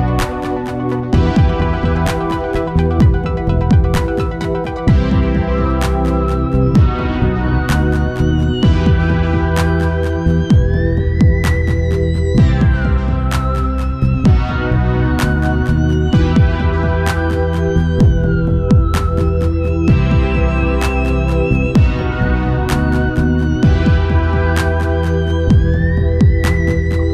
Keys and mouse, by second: 0.1-2.6 middle drag, 1.2 shift+d, 2.6-4.9 drag, 4.2 Tab, 5.7 KP_1, 6.4 z, 8.1 click, 9.2 b, 11.4 e, 12.6 g, 14.5 ctrl+z, 14.8 g, 16.4 ctrl+z, 17.1 b, 18.6 g, 20.9 Tab, 21.7 KP_0, 23.4 shift+f, 24.4 KP_0.